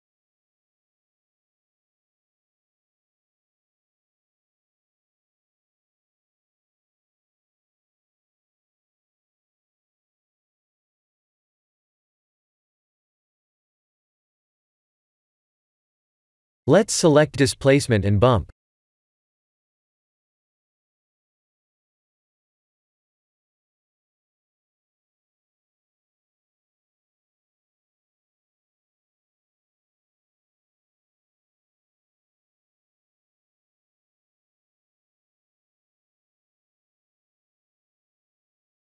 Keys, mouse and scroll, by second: 0.9 shift+middle click, 1.4 middle click, 2.8 click, 4.8 click, 9.9 click, 9.9 middle click, 10.9-11.8 scroll down 13, 13.0 click, 13.0-14.9 scroll down 4, 14.9-15.6 scroll down 1, 15.6 click, 15.6-16.6 scroll down 10, 17.0 click, 19.3 scroll down 3, 21.8 scroll up 4, 24.5-26.7 scroll down 3, 26.7 click, 27.4 click, 30.1 click, 31.6 click, 33.4 click, 36.4 click.